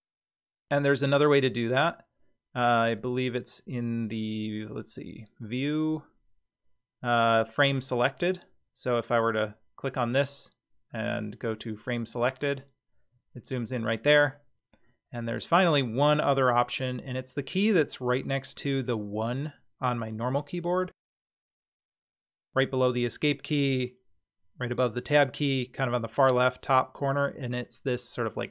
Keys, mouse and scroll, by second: 1.5-1.8 scroll down 3, 2.8-8.5 drag, 9.2 click, 10.9-12.3 drag, 13.7-14.7 scroll down 9, 14.7 scroll up 1, 14.8-15.6 middle drag.